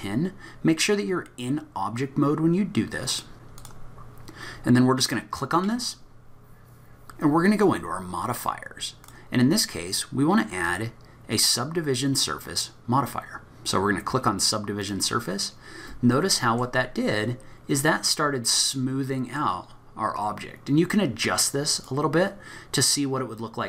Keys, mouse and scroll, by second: 3.3 scroll down 1, 3.3 n, 3.6 click, 4.6-5.1 scroll up 1, 9.0 click, 10.6 click, 16.1 middle click, 16.9-17.4 scroll up 1, 17.4-18.0 scroll up 5, 18.0-18.7 scroll down 1, 18.7 middle click, 18.7-19.1 scroll down 2, 21.7 click.